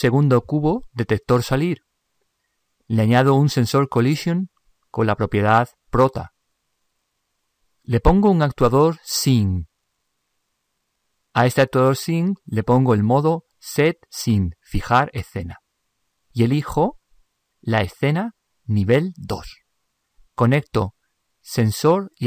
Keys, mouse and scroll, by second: 0.0 ctrl+Up, 1.2-3.7 right drag, 4.4 ctrl+Up.